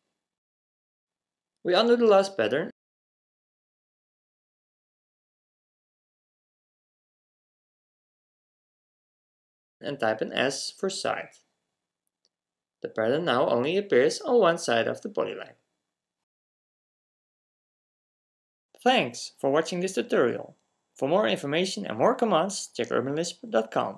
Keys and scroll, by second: 3.0-3.5 typing, 4.9 typing, 10.1 s, 11.4 s.